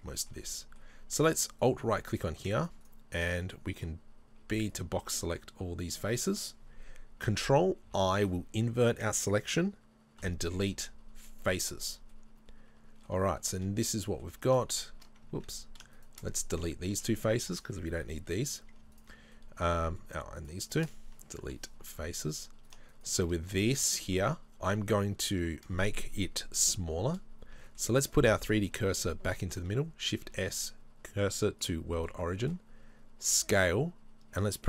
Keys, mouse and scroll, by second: 1.6-5.2 alt+right drag, 5.2 b, 5.9-7.8 shift+right drag, 7.8 ctrl+i, 11.5 Delete, 12.1-14.5 middle drag, 14.5 right click, 15.4 ctrl+z, 16.0-17.6 shift+right drag, 17.6 Delete, 19.0 right click, 19.3-20.4 middle drag, 20.4-21.9 shift+right drag, 21.9 Delete, 22.7-24.0 shift+right drag, 24.0-34.6 middle drag, 27.4-27.8 scroll down 2, 31.7 shift+s, 33.4 s.